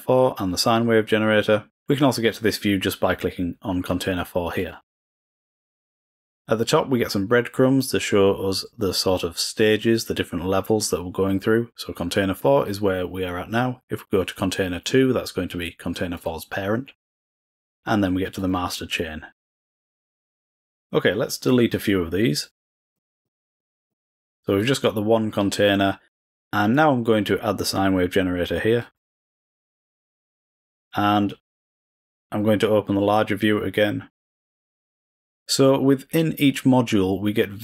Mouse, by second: 0.3-2.7 drag, 4.5 click, 5.5 click, 15.8 click, 18.3 click, 20.0 click, 21.4-23.1 drag, 23.2 click, 23.5 click, 23.8 click, 24.5 click, 26.7 click, 28.8-32.8 drag, 33.0 click, 34.3-35.4 drag, 37.5 click.